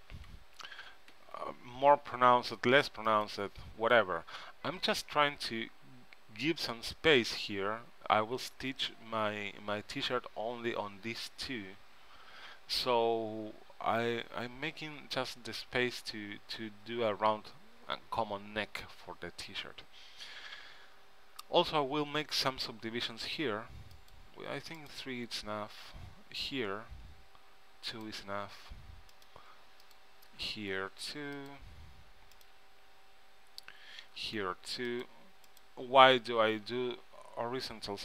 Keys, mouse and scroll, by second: 22.0 ctrl+r, 26.3 ctrl+r, 29.9-31.7 drag, 30.4 ctrl+r, 34.1 ctrl+r, 36.7 ctrl+r.